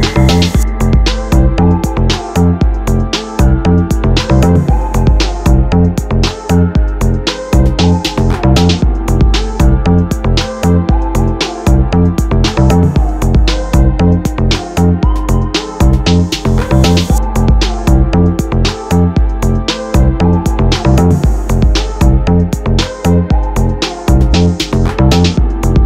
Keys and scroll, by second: 0.8 ctrl+b, 20.8 m, 23.7 Return.